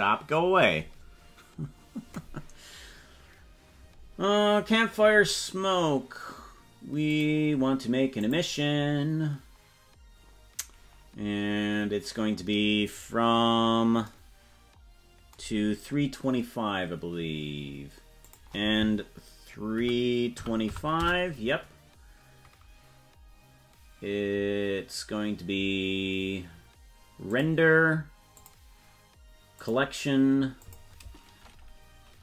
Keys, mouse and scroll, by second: 7.1 click, 8.2 click, 12.9-13.9 scroll down 10, 18.2-21.6 drag, 27.3 click, 28.4-29.8 drag, 30.6-32.2 drag.